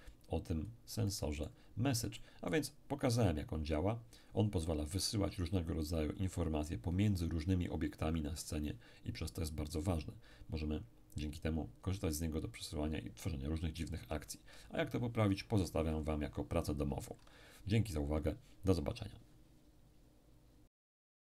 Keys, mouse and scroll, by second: 0.6-1.0 scroll up 1, 1.0 middle click, 1.6-2.1 scroll up 1, 2.1-3.4 middle drag.